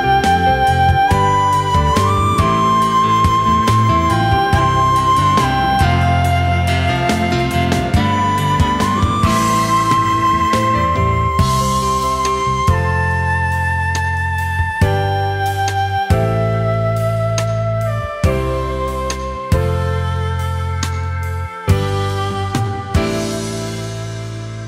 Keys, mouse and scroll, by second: 1.6 alt+scroll down 1, 2.7-4.2 alt+scroll up 1, 4.6 ctrl+z, 13.5 shift+click, 15.9-17.1 alt+scroll down 1, 19.4 ctrl+z, 20.3 alt+scroll down 1, 20.6 space, 21.4 alt+scroll up 1, 21.6 space, 22.6-23.0 alt+scroll up 1, 23.3 alt+scroll down 1, 24.0 ctrl+s.